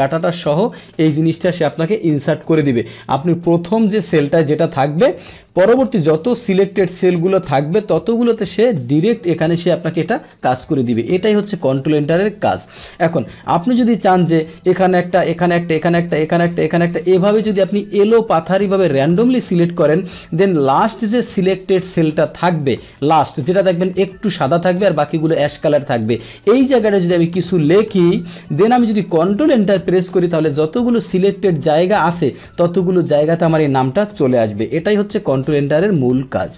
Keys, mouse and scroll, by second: 0.2 click, 1.2-2.6 drag, 2.6 Delete, 2.9 middle click, 4.5 click, 5.5 Return, 6.4 Return, 6.5-7.6 drag, 7.9 F2, 9.7 ctrl+Return, 13.2-14.5 middle drag, 14.5 click, 15.2 ctrl+click, 15.6 ctrl+click, 16.1 ctrl+click, 16.5 ctrl+click, 16.9 ctrl+click, 17.2 ctrl+click, 17.5 ctrl+click, 18.0 ctrl+click, 18.3 ctrl+click, 18.8 ctrl+click, 19.1 ctrl+click, 22.8 ctrl+click, 29.6 ctrl+Return, 30.3 ctrl+Return, 34.9 ctrl+z, 35.9 click.